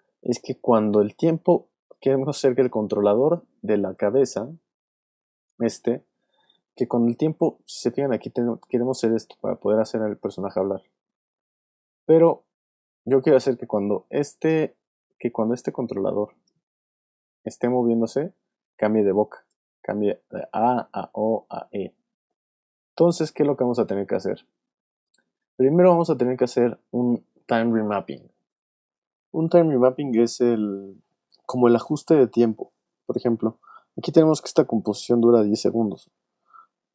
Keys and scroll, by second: 18.9 alt+space, 19.6 space.